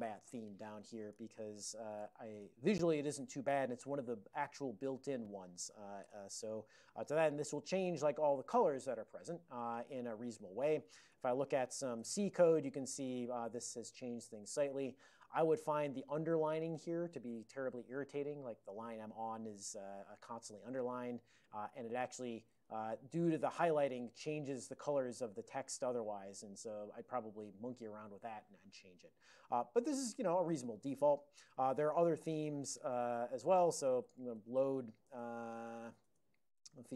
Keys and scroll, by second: 0.8-2.6 typing, 10.8 ctrl+x, 10.9-11.8 typing, 12.0 Return, 12.8 ctrl+n, 14.1 ctrl+n, 15.5 ctrl+f, 15.7 ctrl+f, 15.8 ctrl+f, 16.0 ctrl+f, 16.8 ctrl+a, 17.2 ctrl+f, 19.4 ctrl+n, 20.0 ctrl+n, 21.4 ctrl+n, 22.0 ctrl+p, 22.9 ctrl+f, 23.0 ctrl+f, 23.2 ctrl+f, 23.3 ctrl+f, 25.2 ctrl+n, 25.9 ctrl+n, 31.5 alt+x, 31.5-36.2 typing, 35.1 Tab, 36.7 Return.